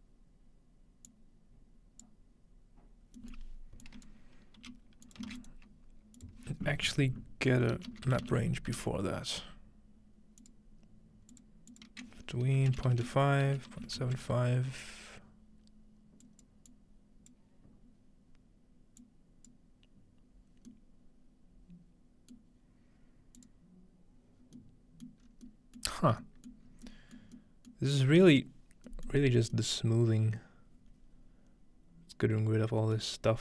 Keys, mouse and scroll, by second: 1.1-2.1 drag, 3.2-4.6 middle drag, 3.8-4.6 drag, 4.6-5.2 scroll down 1, 4.6-5.3 typing, 5.1 click, 5.4 shift+click, 6.2 shift+click, 7.7-8.7 typing, 10.4 click, 11.3 click, 11.7 click, 13.5-14.5 typing, 16.2-20.6 drag, 20.7-23.5 middle drag, 23.4-24.6 drag, 24.4-25.1 scroll down 1, 25.1 middle click, 25.2 scroll up 1, 26.0 middle click, 26.0 scroll down 1, 26.6 middle click, 26.7 scroll up 1, 27.2 middle click, 27.9 middle click, 27.9 scroll down 1, 28.4 middle click, 29.2 middle click, 29.5-30.0 scroll down 1, 33.0-33.4 middle drag.